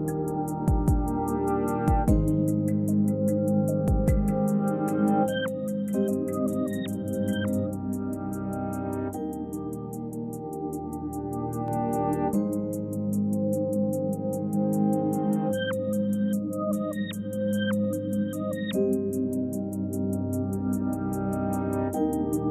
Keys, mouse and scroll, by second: 0.7 shift+a, 5.6 click, 7.3-8.3 middle drag, 8.3-10.8 drag, 12.9 click, 15.6-17.2 shift+middle drag.